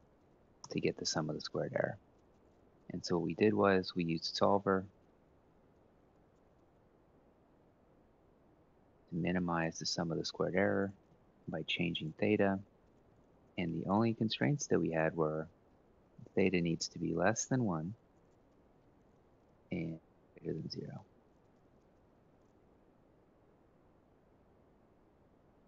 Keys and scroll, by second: 0.3 Return, 18.2 1, 23.1 0.